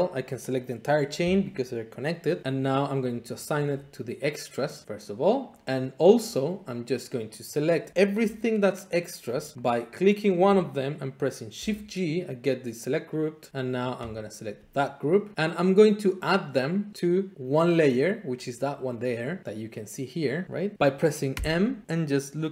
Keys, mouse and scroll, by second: 3.4 click, 4.8 click, 5.4 middle click, 6.4 click, 6.9-7.9 middle drag, 9.8 click, 10.4 middle click, 11.5 g, 14.2 click, 15.7 middle click, 17.6 middle click, 21.4 m.